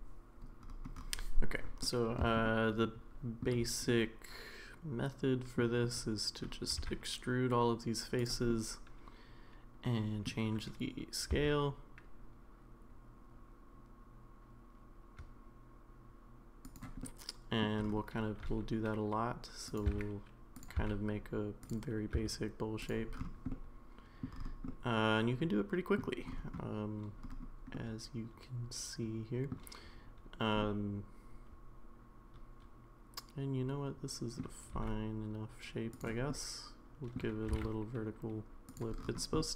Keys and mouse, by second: 1.8 middle click, 2.4 shift+middle click, 3.9-5.6 middle drag, 6.8 e, 8.5-10.3 middle drag, 11.3 s, 17.0 middle click, 18.4 e, 19.9 s, 20.8 e, 22.1 s, 23.5 middle click, 24.7-26.0 middle drag, 27.7-29.5 middle drag, 30.6-34.4 middle drag, 34.7 e, 36.3 middle click, 37.4 g, 39.4-39.5 middle drag.